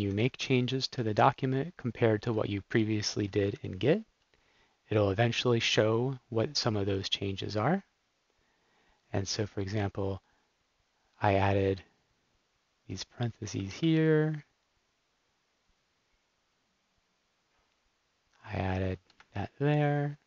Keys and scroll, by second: 0.4 super+x, 2.4 Down, 3.5 super+s, 13.7 BackSpace, 19.1 BackSpace.